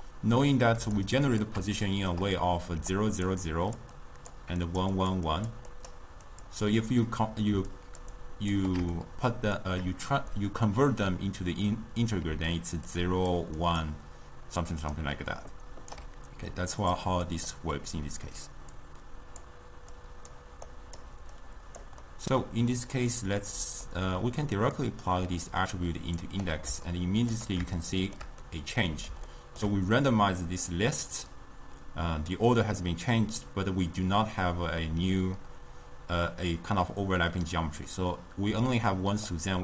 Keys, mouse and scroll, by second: 1.4 click, 1.9-3.0 shift+middle drag, 3.0-8.6 typing, 3.6 click, 4.1 click, 5.1 click, 5.8 click, 7.8 click, 9.1-12.3 shift+middle drag, 12.3 d, 12.8 d, 12.9 d, 13.0 click, 13.4-15.0 d, 15.1-16.1 right drag, 16.1 d, 16.8 click, 17.4 click, 18.8-21.0 drag, 21.5 click, 22.1-24.8 middle drag, 24.8-27.0 drag, 27.0-38.6 shift+middle drag, 38.6-39.6 typing, 38.8 click.